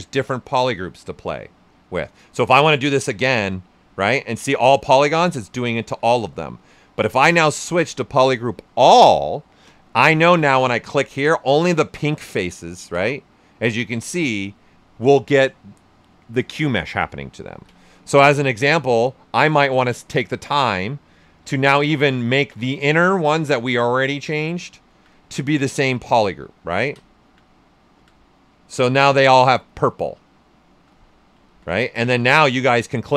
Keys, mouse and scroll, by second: 2.9-4.4 drag, 4.4-5.8 drag, 5.8 ctrl+z, 6.9 space, 7.7 click, 10.5-13.9 drag, 13.9 right click, 17.5 ctrl+z, 17.8 right click, 19.4 alt+click, 20.5 right click, 21.5 right click, 22.3 alt+click, 22.5 right click, 23.0 alt+click, 23.6 alt+right click, 24.5 alt+click, 25.1 right click, 25.6 alt+click, 26.9 ctrl+z, 27.2-28.7 alt+drag, 28.7 right click, 32.9-33.1 drag.